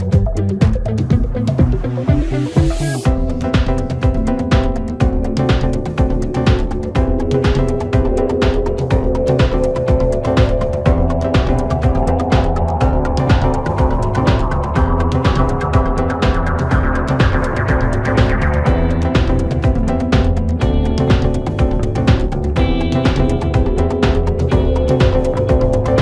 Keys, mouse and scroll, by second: 0.0-0.4 drag, 0.4-1.6 scroll up 2, 1.6 click, 2.2-3.1 scroll up 2, 3.1 Tab, 3.9-5.0 middle drag, 5.0 click, 6.3 x, 8.1 KP_1, 9.2 Tab, 10.9 Tab, 11.6 a, 12.1-12.8 scroll up 2, 12.8 g, 16.6-17.0 scroll down 2, 17.0 Tab, 17.4 scroll down 1, 17.6-19.3 middle drag, 19.3-20.1 scroll down 1, 20.1 KP_1, 21.5 click, 22.4-23.4 scroll up 1, 23.4 g, 25.8-26.0 scroll up 1.